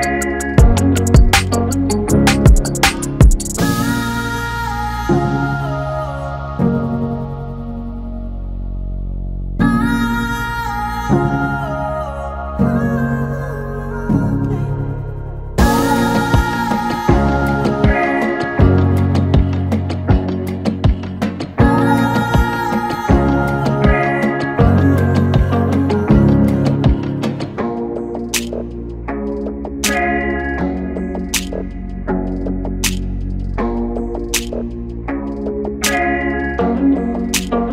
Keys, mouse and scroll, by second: 7.7 alt+o, 9.0 click, 9.5 ctrl+z, 10.8 t, 11.1 click, 11.5 ctrl+a, 12.1-13.3 typing, 14.4 click, 16.3 ctrl+a, 18.1-21.8 drag, 21.8 typing, 25.0-25.7 typing, 29.5 click, 29.5 click, 29.5 typing, 32.2 click, 32.3 click.